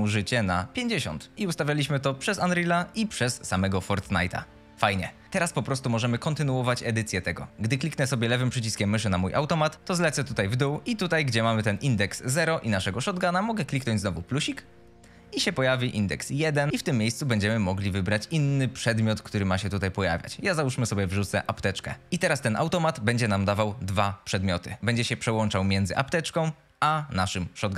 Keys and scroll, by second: 4.9 e, 5.4 w, 6.4 s, 10.5 F22, 22.1 F22.